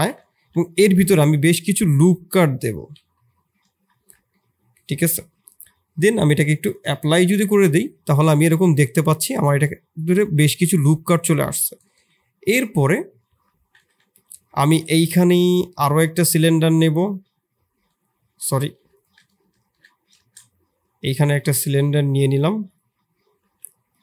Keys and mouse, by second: 0.3 ctrl+r, 3.9 Tab, 4.3-4.9 middle drag, 6.9 click, 7.4 Tab, 7.8-10.6 middle drag, 11.1 Tab, 11.9 KP_1, 13.2 KP_3, 13.9 ctrl+KP_1, 14.5 shift+drag, 14.7 shift+a, 18.8 Delete, 18.9-24.0 drag.